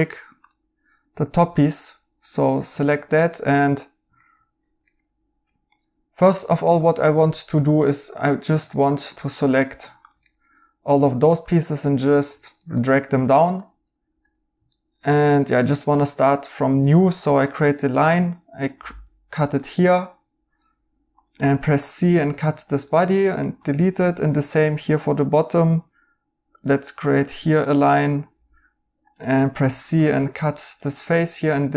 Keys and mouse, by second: 2.7 right click, 6.2 2, 7.2 right click, 10.2 right click, 12.4 right click, 14.6 right click, 17.0 a, 19.5 right click, 21.3 c, 23.5-24.6 typing, 27.8 right click, 29.3-30.1 typing, 31.5 x.